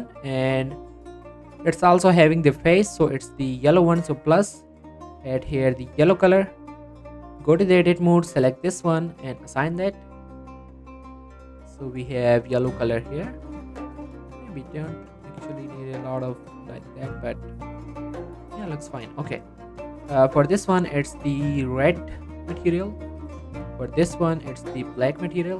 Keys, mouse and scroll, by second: 1.2 g, 1.8 right click, 2.5 middle click, 2.9-4.1 scroll up 1, 4.1 click, 6.3 middle click, 7.0 Tab, 9.1 click, 9.5 Tab, 9.9 click, 10.1 middle click, 10.9 scroll up 1, 11.2-12.6 middle drag, 12.6 scroll down 1, 12.9 middle click, 14.5-18.6 drag, 18.6 scroll down 1, 18.8 middle click, 19.0 click, 19.4 scroll up 1, 19.6 middle click, 20.1 click, 22.4 scroll down 1, 22.5 middle click, 22.8-23.1 scroll up 1, 23.7 click, 25.3-25.5 scroll down 1.